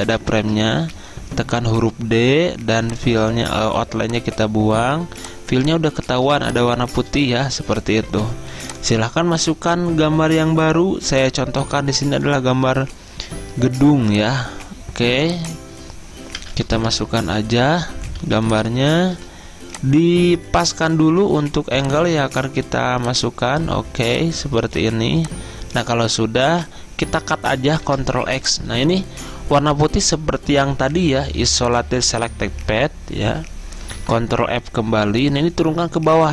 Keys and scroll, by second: 0.4 ctrl+z, 1.0 d, 6.2 z, 8.2 v, 16.5 typing, 17.0 Return, 18.2-19.6 typing, 27.9 ctrl+x, 34.1 ctrl+f.